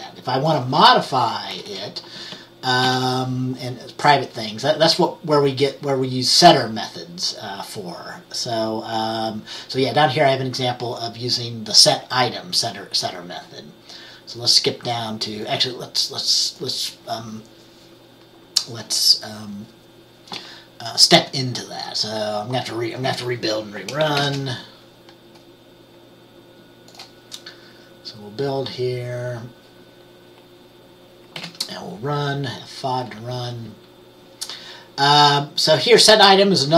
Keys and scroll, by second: 1.5-2.4 typing, 2.9 ctrl+s, 24.3 ctrl+b, 31.5 F5.